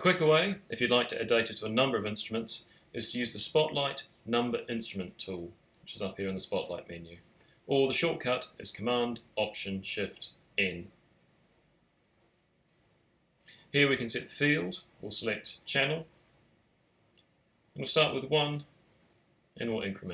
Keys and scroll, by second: 0.4-1.1 typing, 11.7 alt+shift+super+n.